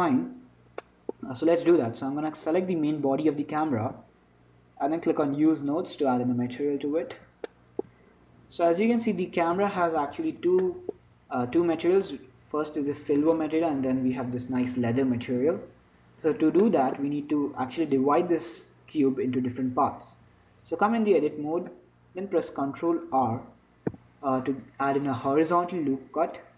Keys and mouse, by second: 0.8-3.5 middle drag, 2.1-3.5 drag, 3.5-4.8 right drag, 5.6-7.5 drag, 7.5-9.0 middle drag, 9.9-11.4 middle drag, 10.9 z, 15.7 Tab, 16.3 Tab, 16.9-18.9 drag, 20.5 Tab, 23.4 ctrl+r.